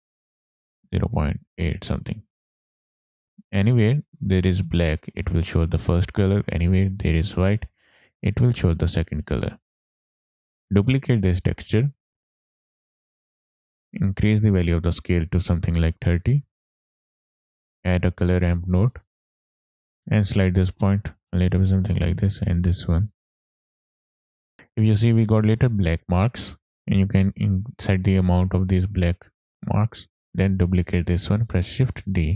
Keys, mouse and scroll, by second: 2.8 click, 9.7 ctrl+z, 9.7 scroll down 1, 9.8 click, 10.3 ctrl+shift+click, 10.4 middle click, 10.4 scroll down 2, 10.5 click, 11.1 shift+d, 12.5-13.1 drag, 13.3 middle click, 13.5-14.2 scroll up 3, 14.1 click, 15.0-16.6 drag, 17.1 middle click, 17.3 click, 17.3 shift+a, 20.0 ctrl+z, 20.0 click, 20.1 ctrl+z, 20.8-21.7 drag, 22.2-22.9 drag, 23.2 drag, 23.6 click, 24.2-24.8 scroll up 5, 26.5 click, 26.7-29.2 drag, 29.9 click, 30.1 shift+a, 31.0 click, 31.5 shift+d.